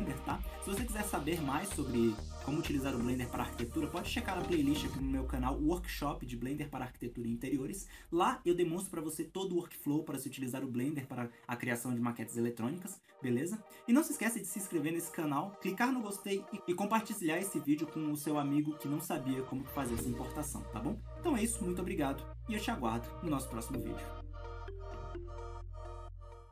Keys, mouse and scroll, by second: 10.7-14.7 shift+middle drag, 14.9-17.2 middle drag, 25.1 middle click.